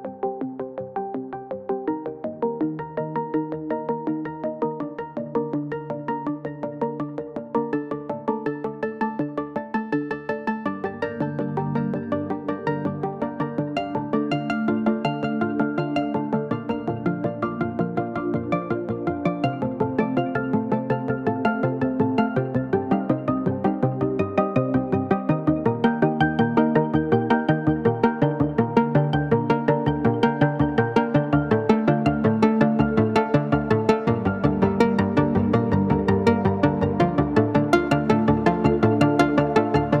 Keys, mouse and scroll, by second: 0.3 click, 1.1 ctrl+d, 1.2 click, 1.5 shift+Down, 2.5 click, 2.6 ctrl+space, 2.8 ctrl+click, 3.3 t, 3.5-5.2 drag, 6.4-9.3 typing, 9.5 click, 10.3 click, 10.4 space, 11.1 click, 13.7 ctrl+click, 13.8 ctrl+space, 14.9-19.4 drag, 17.3 typing, 19.4 shift+click, 20.2-21.2 typing, 20.4-23.4 drag, 24.3 click, 24.7 shift+click, 26.1 click, 26.3-28.4 typing, 27.1 ctrl+space, 27.5 click, 28.0 click, 28.2 click, 29.2 ctrl+space, 29.7 ctrl+click, 30.1-33.6 drag, 35.9 ctrl+z, 36.2 click, 38.4 click, 38.6-40.0 typing, 39.0 click.